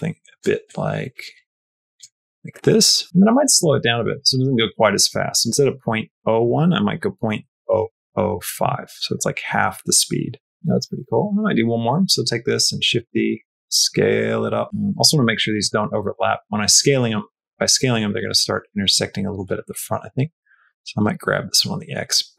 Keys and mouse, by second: 2.0 click, 2.6 click, 3.4-9.2 drag, 9.3 space, 11.5 click, 12.6 shift+d, 13.3 s, 15.5 click, 16.6 middle click, 17.5 shift+middle click, 17.9 middle click, 18.1 shift+middle click, 18.7 shift+middle click, 20.1 g.